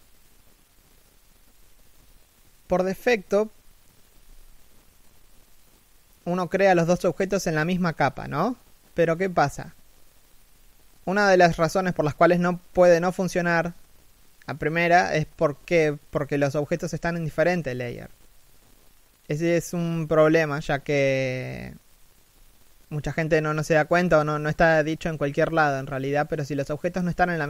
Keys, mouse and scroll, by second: 1.8 right click, 16.5 middle click, 20.5-20.9 scroll up 1, 20.9 shift+middle click, 21.4 scroll up 1, 22.0 shift+middle click, 26.4 middle click.